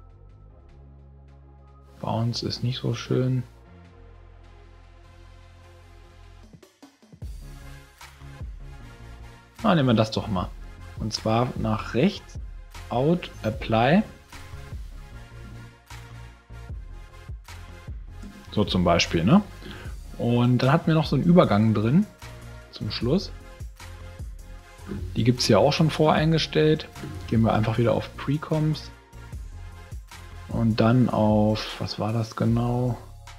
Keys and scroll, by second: 15.4 space, 18.2 space.